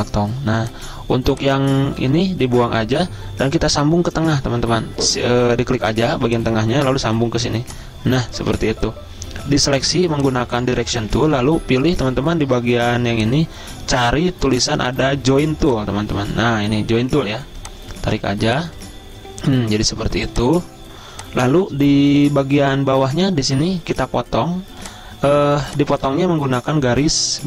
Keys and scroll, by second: 2.2 Delete, 4.8 p, 10.0 a.